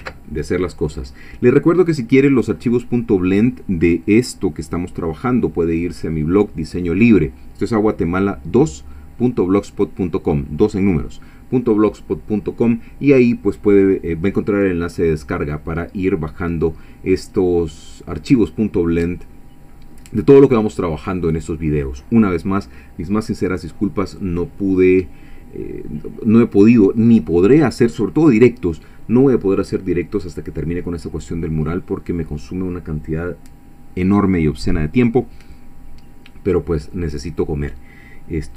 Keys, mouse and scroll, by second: 0.0 ctrl+s.